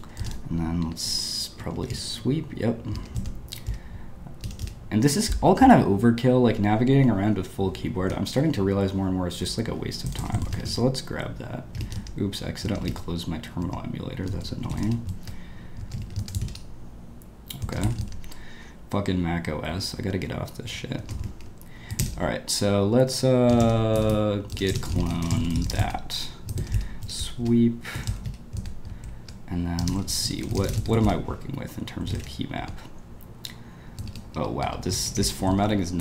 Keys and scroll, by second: 0.1-5.1 typing, 8.1 typing, 9.3-11.1 typing, 11.4 Escape, 12.0 Escape, 12.7 Escape, 13.7 Escape, 14.3-16.2 typing, 15.9 Return, 17.7 ↻, 18.1 ↻, 20.9 ctrl+space, 21.4 shift+p, 22.0 ctrl+l, 23.2-33.1 typing, 28.6 Return, 34.3 ctrl+d, 34.6 ctrl+d, 34.9 ctrl+u, 35.0 ctrl+u, 35.1 ctrl+u.